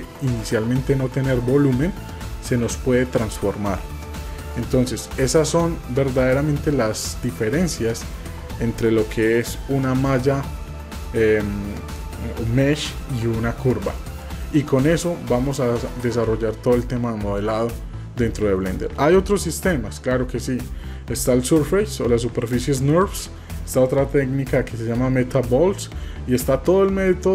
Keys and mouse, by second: 1.4 typing, 14.1 middle click.